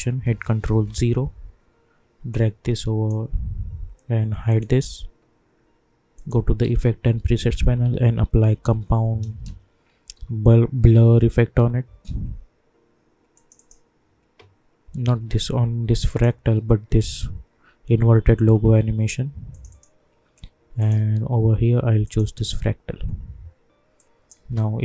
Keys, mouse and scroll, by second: 0.7 ctrl+0, 2.3-4.5 drag, 6.1 click, 6.6 ctrl+a, 7.5-11.5 typing, 13.3 click, 15.0 ctrl+z, 16.0 click, 19.5 click, 24.4 space.